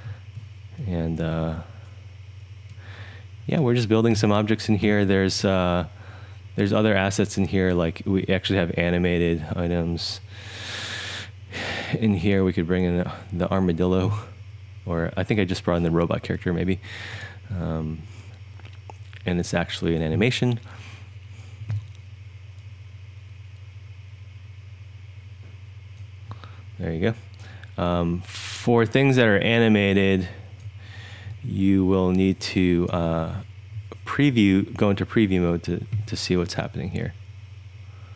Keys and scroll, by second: 0.1 e, 29.1-30.5 3, 31.2-32.1 1, 32.3 1, 32.4-32.9 1.